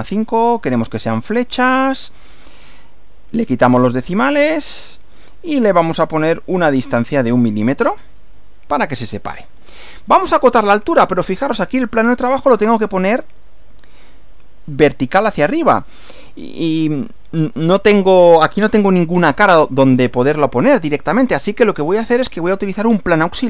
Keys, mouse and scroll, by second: 0.0-0.1 typing, 0.7 click, 1.7 click, 3.8 click, 4.2 scroll down 1, 5.2-6.2 drag, 6.4 click, 7.5 1, 7.8 m, 9.8-11.2 middle drag, 11.3 middle click, 20.4-21.4 shift+middle drag, 21.6 shift+scroll up 1.